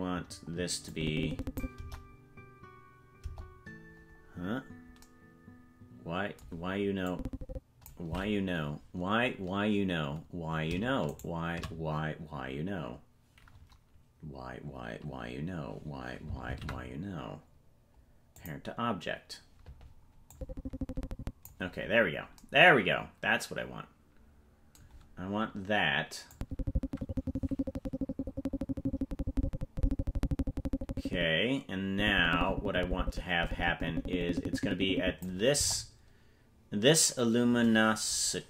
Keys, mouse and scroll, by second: 0.9 click, 1.8 KP_0, 3.2 KP_0, 4.3-5.0 scroll down 6, 7.1 click, 8.6-9.5 scroll up 6, 11.2 shift+right click, 16.4 ctrl+p, 20.3-21.5 drag, 21.9 scroll down 4, 26.3-35.3 drag, 35.7 KP_0, 38.3-38.4 scroll down 7.